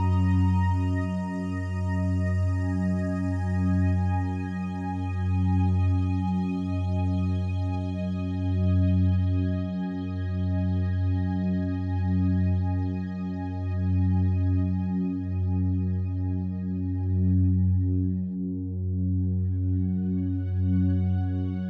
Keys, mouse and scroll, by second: 1.9 click, 2.8 s, 4.8 click, 5.6 right click, 7.0 2, 7.2 right click, 9.2-12.4 drag, 12.4 a, 12.8 a, 13.3-18.3 alt+drag, 18.3 right click, 19.2 3, 20.0 right click.